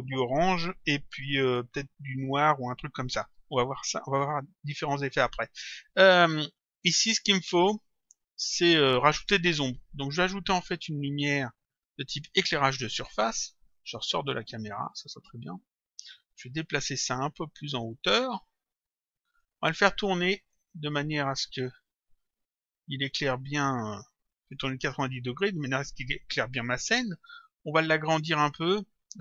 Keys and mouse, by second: 10.5 click, 11.4 click, 14.5 click, 16.6 click, 18.8 click, 20.4 click, 21.7 click, 23.1 click, 28.5 click.